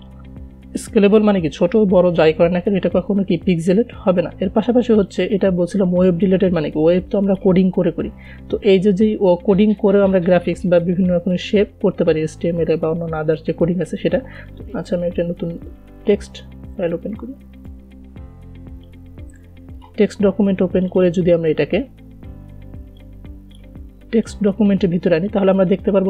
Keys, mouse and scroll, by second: 5.4 click, 14.5 click, 15.0 right click, 16.0 click, 18.0-26.0 drag.